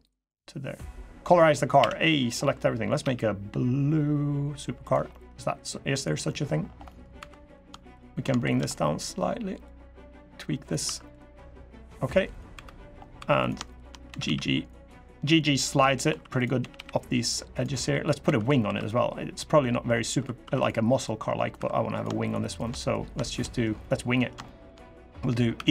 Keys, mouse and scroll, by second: 0.0 click, 0.9 scroll down 3, 1.2 middle click, 1.5 a, 1.8 middle click, 2.8 g, 4.9 middle click, 5.1 scroll up 2, 5.7 click, 6.0 middle click, 6.4 scroll down 2, 6.6 middle click, 6.9 2, 7.2 click, 7.7 shift+click, 8.2 click, 8.5 middle click, 9.4 click, 10.6 1, 10.8 click, 11.4 click, 12.3 3, 12.4 middle click, 12.9 2, 13.1 click, 13.5 shift+click, 13.8 g, 15.8 1, 16.1 click, 16.3 g, 17.5 middle click, 18.0 2, 18.4 3, 18.5 click, 19.4 middle click, 19.9 2, 20.2 1, 20.3 click, 20.8 click, 21.3 3, 21.7 click, 22.0 shift+click, 22.2 shift+click, 22.5 middle click, 23.1 shift+middle click, 23.5 middle click, 24.2 shift+middle click, 24.5-25.0 scroll up 1, 25.3 e.